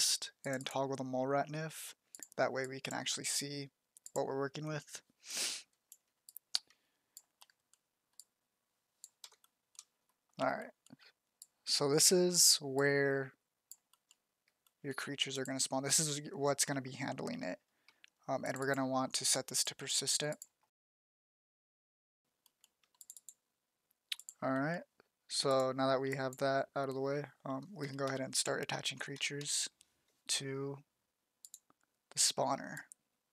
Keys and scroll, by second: 8.5 z, 10.7 f, 27.4-29.7 typing.